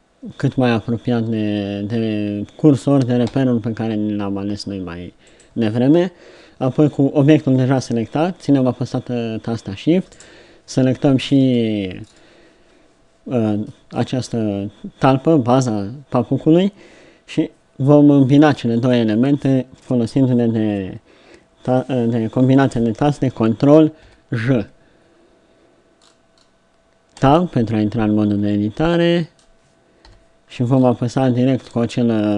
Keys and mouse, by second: 3.3 g, 10.1-24.0 right drag, 24.0 ctrl+j, 26.0-27.2 drag, 27.2 Tab, 28.2 z, 30.1 KP_3.